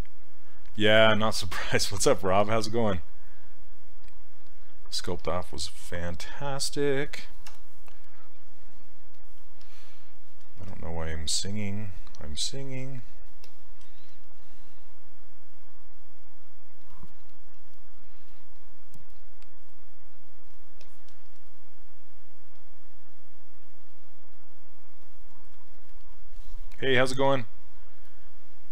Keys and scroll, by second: 7.5 w.